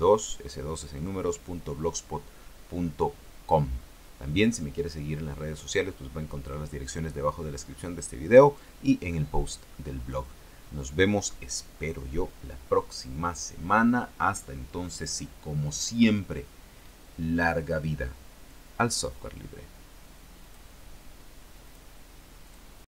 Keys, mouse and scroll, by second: 20.5 click, 21.8 click.